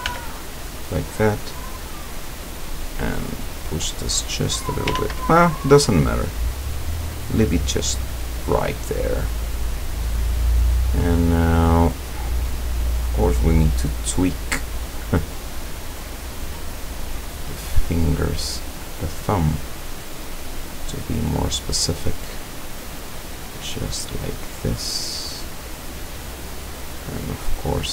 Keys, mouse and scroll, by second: 0.1 f, 1.5 right click, 2.4-4.3 drag, 5.0 ctrl+z, 5.5 ctrl+click, 5.6 ctrl+middle click, 5.7-7.6 ctrl+drag, 7.7-8.1 scroll down 2, 8.3-9.6 drag, 10.0 scroll down 2, 10.4-11.7 drag, 12.1 click, 13.2 click, 14.3 right click, 14.7-15.2 middle drag, 15.2 scroll up 1, 16.0-17.4 drag, 18.0 right click, 18.6 click, 19.5 right click, 20.0-21.0 drag, 21.7 middle click, 22.7 right click, 23.2 click, 24.6 right click, 25.0 click, 27.1 right click.